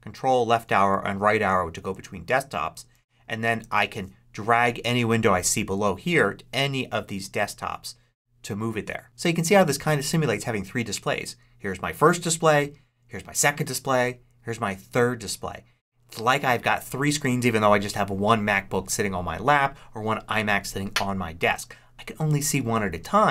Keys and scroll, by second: 0.0 ctrl+Right, 12.4 ctrl+Right, 13.8 ctrl+Right.